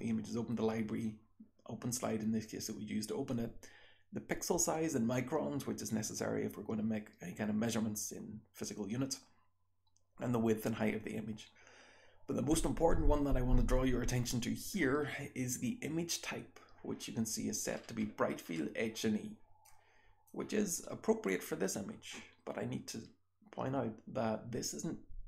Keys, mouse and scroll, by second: 17.7-19.2 scroll up 2, 19.7 click, 20.7 click, 21.3-25.2 scroll up 1.